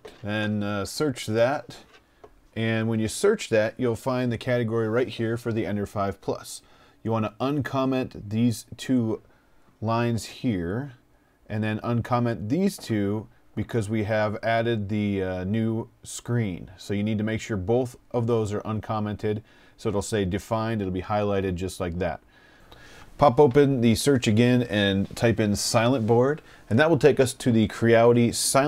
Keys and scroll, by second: 6.9 BackSpace, 7.3 BackSpace, 13.6 BackSpace, 14.0 BackSpace, 21.6 f, 22.7-26.3 typing.